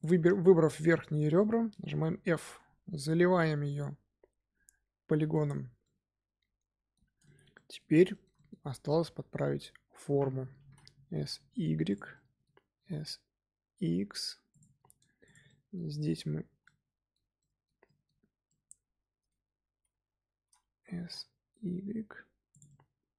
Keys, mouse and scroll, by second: 0.6 alt+click, 1.1 middle click, 2.1 f, 2.4 Tab, 2.8 scroll down 2, 2.9-8.6 middle drag, 8.6 scroll up 1, 8.8 Tab, 9.4 a, 10.5 s, 12.1 middle click, 12.7 s, 14.9 Tab, 15.2 click, 15.4 middle click, 15.8 Tab, 16.4 a, 16.6-17.7 middle drag, 17.7-18.4 scroll up 2, 17.8 middle click, 18.4-20.9 middle drag, 20.9 s, 22.6-23.1 middle drag.